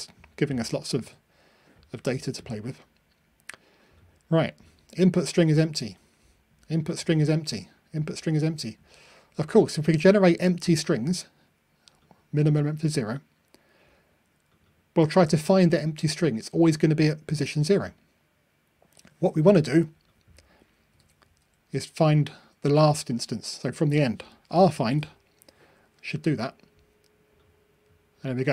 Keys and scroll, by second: 24.9 ctrl+r.